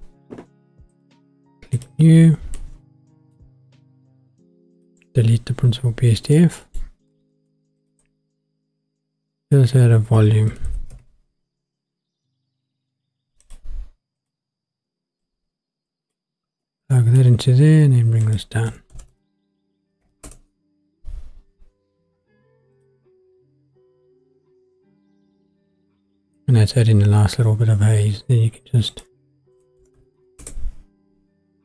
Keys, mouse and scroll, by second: 1.0 click, 1.7 click, 2.6 middle click, 4.0-4.7 scroll up 1, 4.7 click, 5.2 Delete, 5.9-6.7 scroll down 2, 6.4 middle click, 7.3 shift+a, 15.2-16.1 drag, 16.6 middle click, 18.2-20.2 drag, 22.9 click, 28.9-30.4 drag.